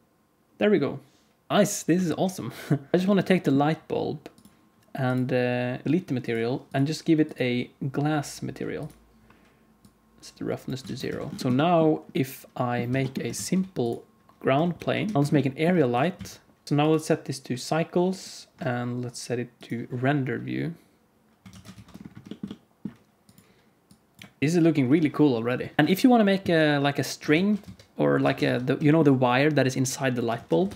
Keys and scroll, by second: 2.0 alt+shift+z, 2.9 alt+a, 2.9 ctrl+s, 10.8 alt+a, 11.1 ctrl+s, 11.4 ctrl+s, 12.9 ctrl+s, 13.3 shift+a, 14.7 alt+g, 15.8 g, 16.6 g, 21.4 alt+a, 21.7 ctrl+s, 27.2 alt+shift+z, 28.1 alt+a, 28.4 ctrl+s, 30.3 KP_1, 30.6 ctrl+s.